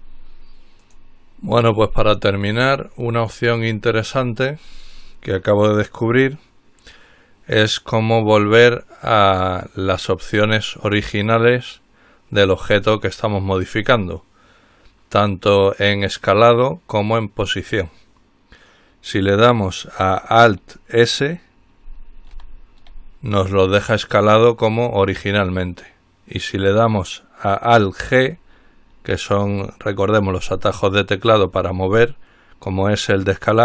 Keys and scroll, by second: 22.6 alt+s.